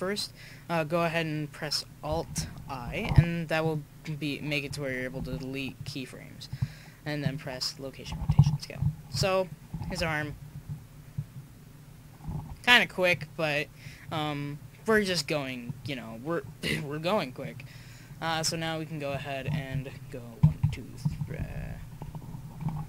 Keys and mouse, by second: 2.9 alt+i, 5.2 i, 8.7-10.0 drag, 9.8 alt+a, 10.1 click, 12.4 alt+a, 13.2 click, 18.3 click, 18.4-20.4 right drag, 20.4 Right, 20.6 Right, 21.4 Left.